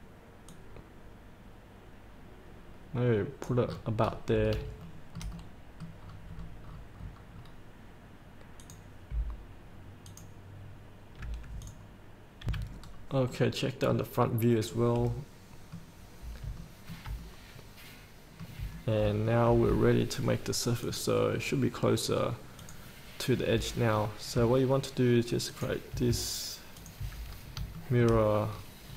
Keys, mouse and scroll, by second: 0.7-3.6 drag, 3.8 scroll up 1, 4.4 scroll up 1, 5.1 shift+middle click, 5.5 middle click, 6.3-7.5 scroll down 1, 8.8-9.9 drag, 12.6 F8, 13.1-13.5 scroll up 1, 13.5 middle click, 14.4 scroll up 1, 14.9-16.1 middle drag, 17.4 middle click, 19.0 shift+middle click, 19.2 shift+middle click, 21.1 click, 23.6 scroll down 1, 24.3 scroll down 1, 25.7 ctrl+click, 27.0 ctrl+click, 27.5 scroll up 1, 28.0 shift+middle click, 28.7-28.9 scroll down 1.